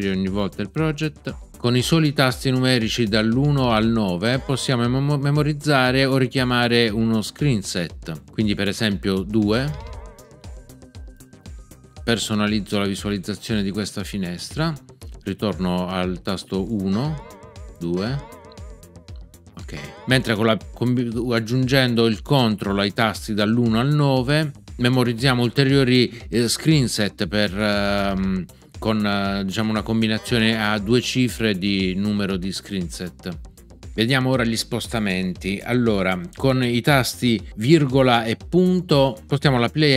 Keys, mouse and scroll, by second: 9.5 2, 16.9 1, 17.9 2, 19.7 1.